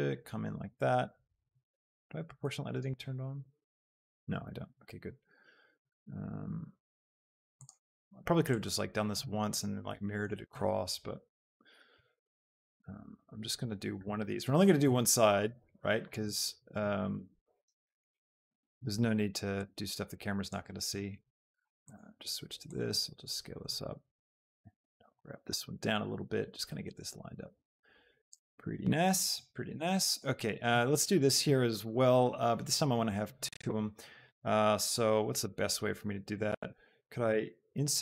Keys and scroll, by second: 14.1 e, 14.5 Escape, 14.8 s, 17.8 z, 18.1 Escape.